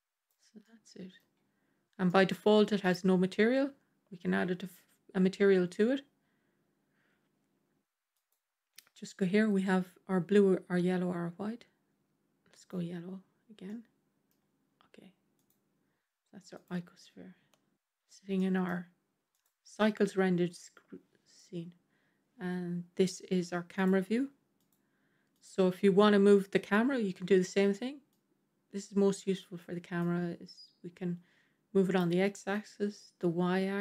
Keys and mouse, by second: 0.5-1.1 middle drag, 1.9 middle drag, 8.1-12.6 drag, 13.5-14.2 middle drag, 18.2-18.5 middle drag, 21.4 KP_0, 23.6 click, 24.5 click, 28.0-29.5 drag, 30.0-31.9 drag, 32.5-33.8 drag.